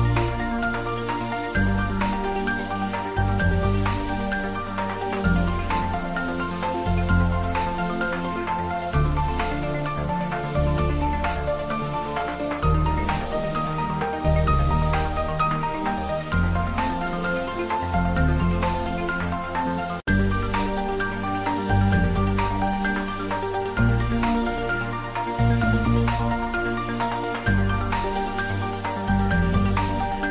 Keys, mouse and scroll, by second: 0.3 ctrl+r, 1.1 click, 1.5 s, 2.7 Tab, 2.8 middle click, 3.4 click, 3.6 ctrl+z, 4.0 s, 5.2 click, 5.3 Tab, 5.7-7.8 middle drag, 8.1 Tab, 9.0-10.3 middle drag, 10.3 3, 10.5 click, 11.2 s, 12.5 click, 12.6 Tab, 13.0 middle click, 13.8 ctrl+3, 14.0 Tab, 14.2 middle click, 14.9 ctrl+r, 15.3 click, 16.7 Tab, 17.0 middle click, 17.8 middle click, 18.1 Tab, 18.7 ctrl+r, 19.1 click, 20.0 Tab, 20.2 click, 20.4 Tab, 20.6 click, 21.9 3, 22.1 click, 22.7 i, 23.0 click, 23.1 Tab, 23.4 middle click, 23.7 Tab, 23.9 middle click, 24.6 ctrl+r, 24.8 click, 27.5 click, 27.6 Tab, 27.8-29.0 middle drag, 29.0 Tab, 29.6 ctrl+r.